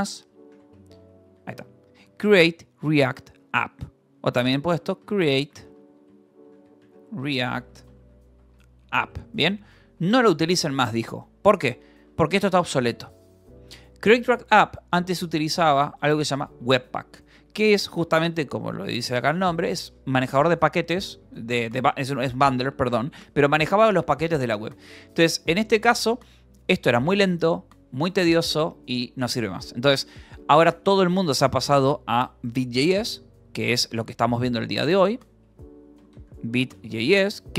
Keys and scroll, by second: 0.0-2.0 typing, 3.9-7.8 typing, 8.9-12.5 typing, 10.3 Escape, 11.8 Escape, 13.5 Escape, 14.1 o, 15.7-18.4 typing, 18.9 Escape, 27.3 shift+v, 28.0 d, 28.4 Escape, 30.2 v, 30.9 e, 31.7 Escape, 33.0-37.5 typing, 33.5 Escape.